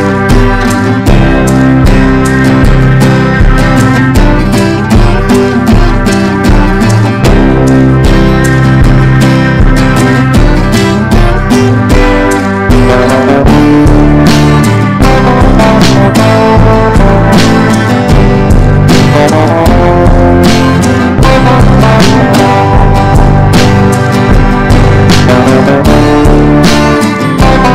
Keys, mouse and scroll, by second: 0.4-1.9 drag, 2.9 shift+click, 3.9 click, 5.4 ctrl+d, 5.9-8.1 drag, 8.5 shift+click, 9.9 click, 12.1 ctrl+d, 12.7-17.4 drag, 17.7 Down, 18.2 Down, 18.6 right click, 19.0 click, 23.0 BackSpace, 24.2 KP_4, 24.4 KP_5, 25.1-27.7 drag.